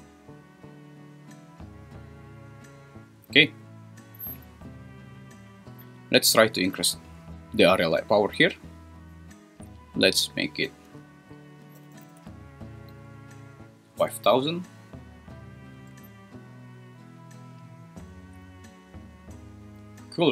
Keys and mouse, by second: 9.8-14.0 drag, 11.9 0, 12.1 0, 15.9 `.